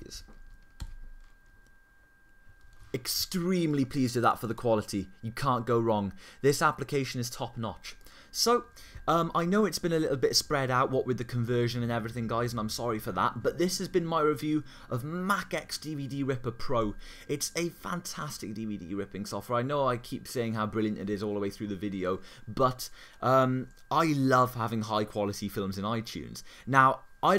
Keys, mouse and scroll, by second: 0.8 super+i.